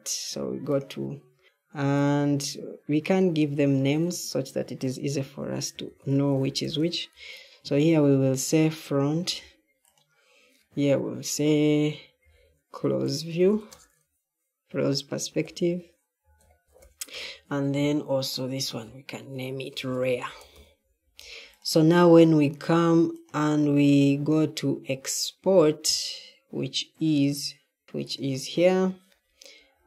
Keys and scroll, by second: 5.8-7.1 typing, 8.6-9.4 typing, 11.9-14.0 typing, 15.0-20.9 typing.